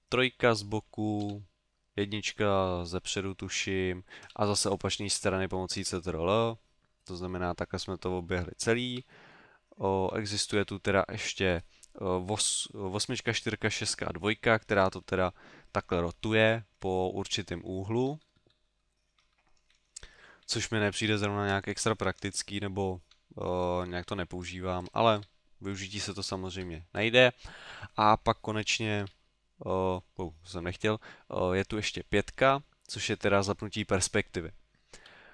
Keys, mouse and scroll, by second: 1.2 KP_1, 4.3 ctrl+KP_1, 5.8 ctrl+KP_3, 8.9 ctrl+KP_8, 10.0 KP_8, 10.5 KP_8, 14.2-20.7 typing, 23.0-25.8 typing, 32.1 KP_5, 35.0 KP_5.